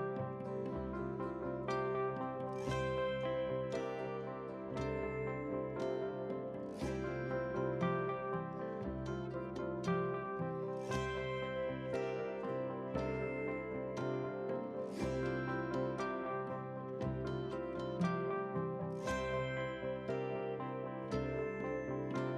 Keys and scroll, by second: 13.2 ctrl+c, 17.0 ctrl+v, 17.7 ctrl+space.